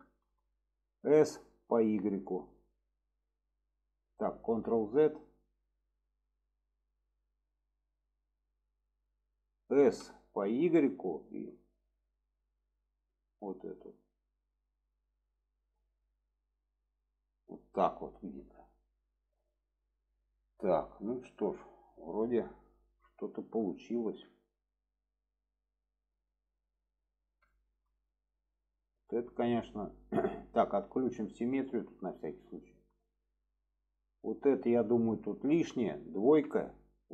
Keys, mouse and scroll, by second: 0.1 middle drag, 4.7 ctrl+z, 18.2 middle click, 20.0 click, 20.9-21.8 middle drag, 23.8 shift+middle click, 24.8-26.9 middle drag, 27.5 shift+middle drag, 28.0-29.1 middle drag, 29.6 middle click, 31.1 click, 31.5 shift+middle click, 32.3-34.2 middle drag, 34.7 shift+middle click.